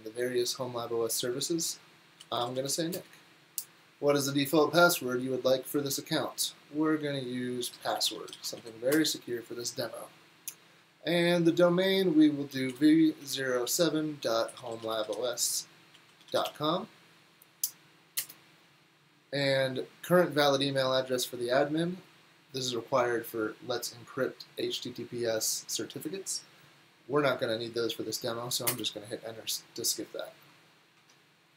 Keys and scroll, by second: 2.0-3.1 typing, 7.4-9.4 typing, 12.5-18.7 typing, 28.5-29.2 typing.